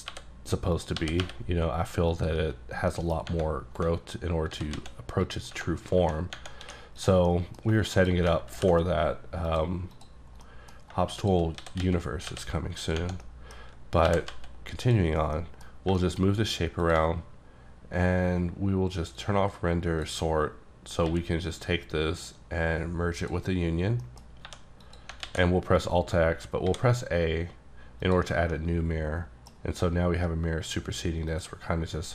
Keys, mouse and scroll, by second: 0.0-1.2 typing, 0.7 scroll up 1, 0.8 click, 2.1 click, 2.6-2.9 scroll up 2, 2.9 middle click, 3.8-4.5 scroll down 3, 4.5 s, 4.8 z, 5.3 click, 5.7-6.4 scroll up 4, 6.7 2, 7.0 click, 7.3 middle click, 7.7 shift+middle click, 8.0 shift+click, 8.5 ctrl+b, 9.5 click, 10.0 click, 10.2 scroll down 2, 10.4 scroll up 1, 10.5 middle click, 11.2 shift+click, 11.6 s, 11.8 x, 12.3 y, 12.8 click, 13.1 scroll down 1, 13.2 middle click, 14.1 g, 14.8 click, 15.1 scroll down 2, 15.3 scroll up 1, 15.4 middle click, 15.6-16.0 scroll down 2, 16.0 shift+middle click, 16.9 shift+click, 19.2 click, 21.1 q, 23.2 click, 24.1 middle click, 24.5 1, 24.9 click, 25.3 alt+x, 26.4-26.7 scroll down 2, 26.7 a, 28.0 click, 28.6 middle click, 31.3 click.